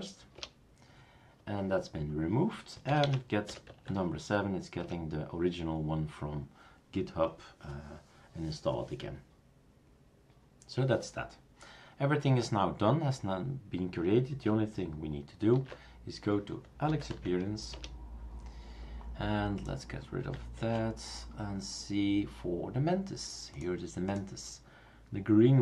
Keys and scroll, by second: 0.4 Return, 2.9-3.5 typing, 3.7 Tab, 4.8 Return, 15.5 super+d, 16.6-17.6 typing, 17.7 Return, 20.6 super+q.